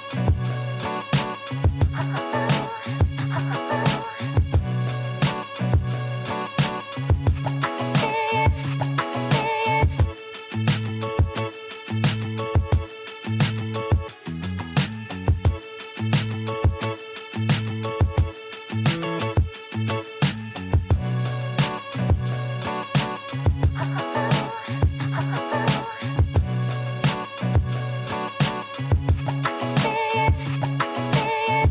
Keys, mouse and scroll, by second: 0.0-0.6 scroll up 5, 2.3-3.7 drag, 3.7-4.7 scroll down 2, 4.7 KP_1, 5.4 Tab, 6.3-7.0 scroll up 1, 7.0 shift+z, 7.5-8.3 scroll up 2, 8.3-11.4 shift+middle drag, 16.8 ctrl+r, 23.4 ctrl+r, 27.1 click, 29.9 click, 31.5 click.